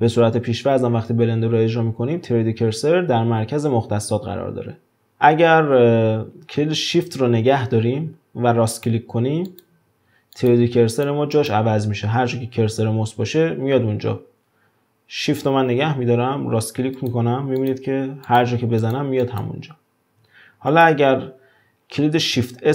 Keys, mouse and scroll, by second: 1.1-4.2 scroll down 2, 5.1-7.4 middle drag, 8.7-14.4 shift+right drag, 17.0-17.8 shift+right drag, 18.3 shift+right click, 18.8 shift+right click, 19.2 shift+right click, 20.7 click.